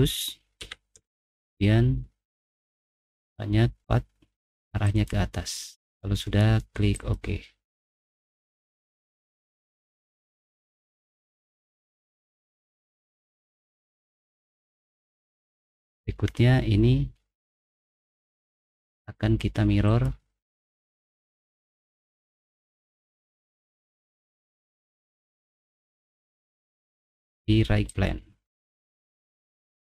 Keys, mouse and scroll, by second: 0.6-0.9 typing, 2.5 click, 2.7 click, 4.8 click, 6.9 click, 8.9 middle click, 9.4-10.4 scroll up 2, 11.1 middle click, 11.1-11.9 scroll down 3, 11.6 middle click, 12.9 middle click, 12.9 scroll down 1, 13.3 scroll up 1, 13.5-13.9 scroll down 2, 14.7-15.1 scroll down 2, 19.8 click, 21.3 click, 24.8 click, 27.9 click.